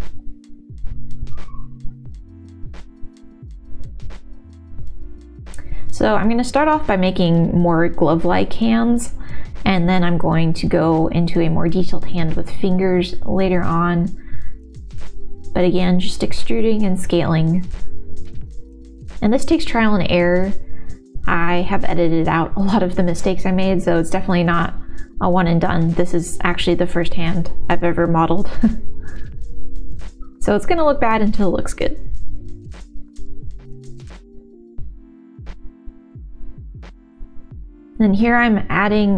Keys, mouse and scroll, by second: 0.1 middle click, 0.7 ctrl+s, 1.0 shift+middle click, 1.3 middle click, 2.3 1, 2.6 middle click, 3.0 g, 3.4 middle click, 4.2 g, 4.4 middle click, 5.6 3, 7.0 x, 7.9 middle click, 8.8 1, 9.0 2, 10.3 middle click, 11.0 e, 12.9 click, 13.6 KP_1, 14.1 e, 19.3 s, 20.5 g, 22.1 1, 22.4 click, 23.2 f, 24.1 f, 25.7 f, 25.9 middle click, 26.5 ctrl+z, 26.5 e, 28.7 middle click, 28.7 s, 29.6 g, 31.0 shift+z, 33.3 click, 33.7 shift+z, 33.8 click, 34.1 shift+z, 34.7 g, 36.6 s, 38.0 ctrl+r, 38.6 ctrl+r.